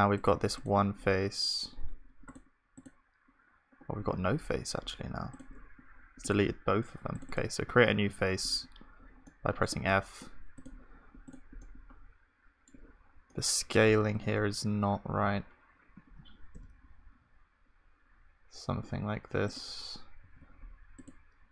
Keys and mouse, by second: 8.1 f, 14.1 Tab, 15.0 s.